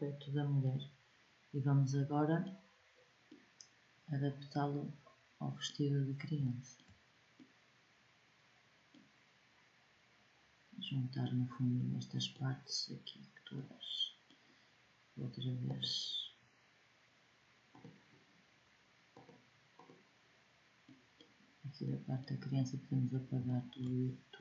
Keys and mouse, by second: 3.7-4.7 middle drag, 7.3-8.1 middle drag, 15.4-19.9 drag, 20.3 click.